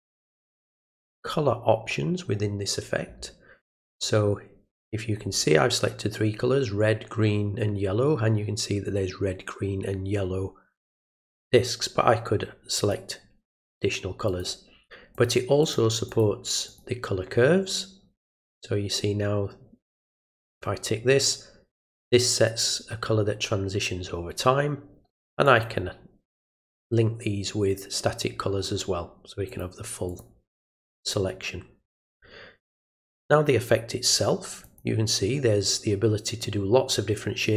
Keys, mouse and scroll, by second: 12.8 click, 14.3 click, 15.1 click, 15.6 click, 16.1 click, 16.7 right click, 18.4 click, 20.5 click, 25.4 click, 26.4 click, 29.5 click, 30.1 click, 34.6 click.